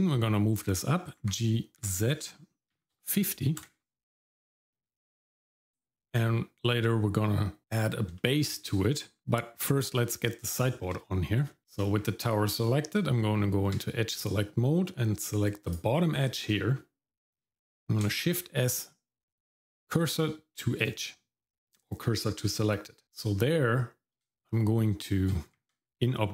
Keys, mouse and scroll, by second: 1.2 g, 4.7-6.1 shift+middle drag, 8.2 shift+middle click, 8.7 middle click, 10.6 shift+middle click, 11.5 shift+middle click, 11.6 click, 11.6 scroll up 2, 12.0 Tab, 15.6 click, 18.3 shift+s, 25.5 Tab.